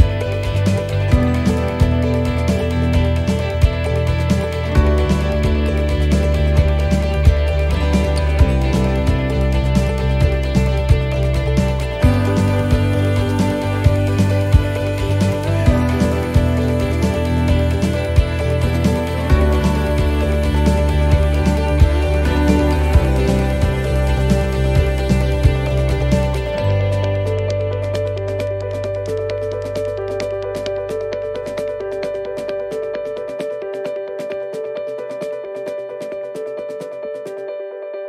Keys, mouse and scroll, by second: 0.2 ctrl+r, 3.2 s, 5.6 middle click, 7.2 shift+middle click, 8.1-8.7 scroll up 1, 8.9 shift+middle click, 9.8 middle click, 11.6 click, 13.0 middle click, 14.1 s, 16.3 shift+middle click, 17.6-17.9 scroll down 1, 21.0 ctrl+r, 27.7 ctrl+e, 29.4 ctrl+r, 33.2 alt+shift+right click, 35.2 e, 36.1 alt+s.